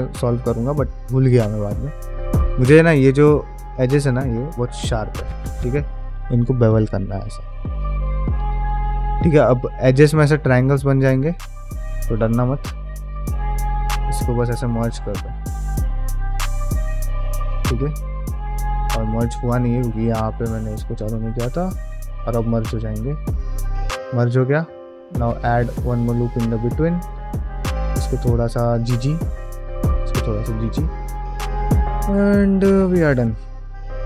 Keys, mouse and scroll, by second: 0.0 middle click, 0.6 shift+middle click, 1.0-3.2 middle drag, 3.6-5.1 middle drag, 6.0 ctrl+b, 7.8 middle click, 8.4 shift+middle click, 9.0 middle click, 9.5 shift+middle click, 10.1 middle click, 10.4 1, 10.8 click, 11.0 middle click, 11.7 click, 12.1 g, 14.8 middle click, 15.9-17.2 middle drag, 17.7 middle click, 18.2 ctrl+z, 20.1 click, 20.9 g, 22.0 middle click, 22.9 click, 23.2 g, 24.4 ctrl+r, 26.1 middle click, 26.6 click, 27.0 g, 28.0 middle click, 28.3 middle click, 28.9 click, 29.3 g, 30.4 middle click, 30.7 ctrl+middle click, 31.0-33.2 middle drag, 33.6 middle click.